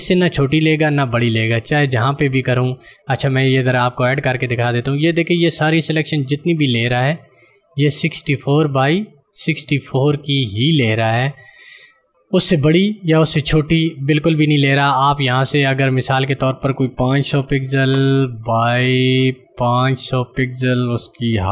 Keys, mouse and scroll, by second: 0.4 click, 6.6 click, 11.9 click, 19.6 click.